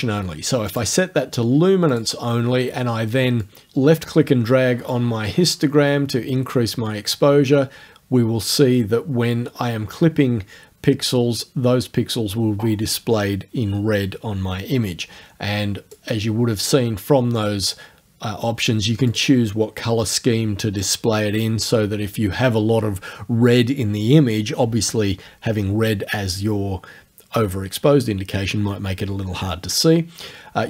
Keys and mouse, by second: 0.7 click, 1.9 click, 3.4 click, 4.9-16.1 drag, 17.4 right click, 19.1 click.